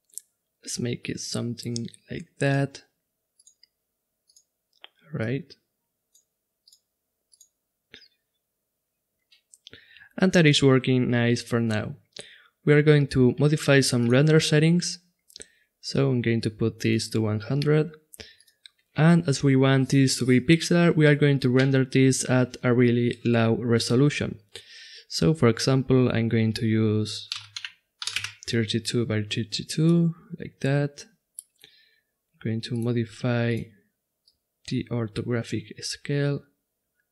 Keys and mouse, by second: 3.4-6.0 drag, 6.6-9.1 drag, 13.9-17.7 drag, 18.3-20.2 drag, 32.7-36.1 drag.